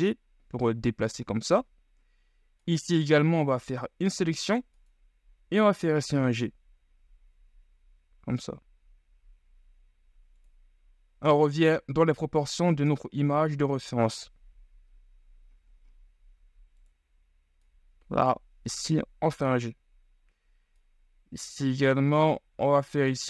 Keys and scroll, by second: 3.3 c, 5.4 g, 12.3 g, 22.6 ctrl+z.